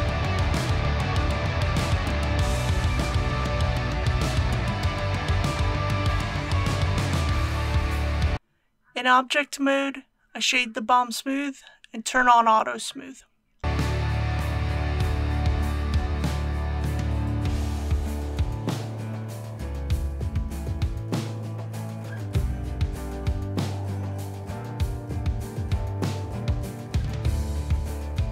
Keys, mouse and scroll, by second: 0.9 KP_1, 5.4 BackSpace, 5.8 KP_3, 8.0 click, 8.3 alt+a, 8.5 click, 9.1 ctrl+click, 9.6 ctrl+click, 10.1 ctrl+click, 11.1 right click, 11.7 click.